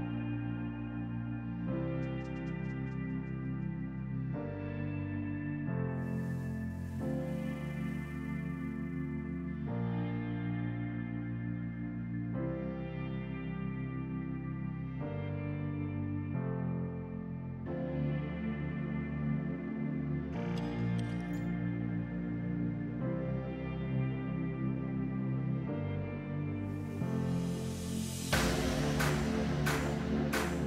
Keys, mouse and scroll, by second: 2.1 middle click, 2.9 Tab, 3.1-3.5 scroll up 1, 3.5 shift+middle click, 4.1 ctrl+r, 5.9 click, 6.3 ctrl+r, 7.4 click, 8.0 ctrl+r, 9.3 click, 9.6 middle click, 9.9-10.2 scroll up 1, 10.2 middle click, 10.8 ctrl+r, 12.4 click, 12.8-13.1 scroll down 1, 13.1 middle click, 13.4 scroll down 1, 13.6 Tab, 13.9 drag, 14.1 scroll down 1, 14.3-15.1 middle drag, 15.1 click, 16.0-17.5 drag, 17.6-18.3 scroll down 1, 18.3 click, 18.5 click, 18.9-20.7 drag, 20.7 Tab, 21.3 shift+middle click, 22.0 ctrl+r, 23.1 click, 23.6 ctrl+r, 24.5 click, 24.8 KP_1, 25.1-25.8 scroll up 1, 26.5 ctrl+r, 29.2 click, 29.7 scroll down 1, 29.9 shift+middle click, 30.2-30.6 scroll up 1.